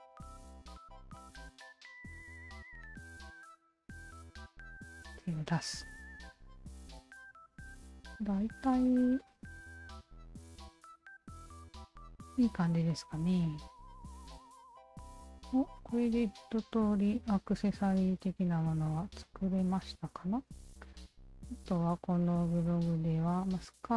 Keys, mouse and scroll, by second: 0.0 click, 0.2 Tab, 0.6 alt+right click, 1.2 click, 1.7 alt+right click, 2.0 alt+right click, 2.3-3.1 alt+drag, 3.4-3.9 alt+right drag, 5.1 alt+click, 6.3 alt+click, 7.8-8.6 alt+drag, 8.9-9.7 alt+drag, 9.9-12.6 alt+drag, 12.9 alt+right drag, 13.4-14.9 alt+drag, 15.1 drag, 15.5 alt+drag, 15.8-17.0 alt+drag, 17.9 alt+click, 19.2 alt+click, 22.1 scroll down 1.